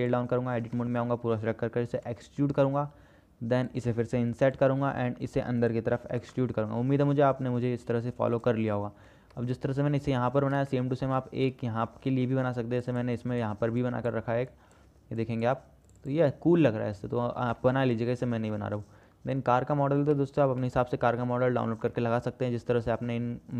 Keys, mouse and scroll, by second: 0.9 Tab, 1.5 a, 2.1 e, 9.5 Tab, 11.0 shift+click, 11.3 shift+middle click, 11.9 shift+middle click, 18.8 shift+middle click, 20.7 KP_0, 22.1-22.9 shift+middle drag.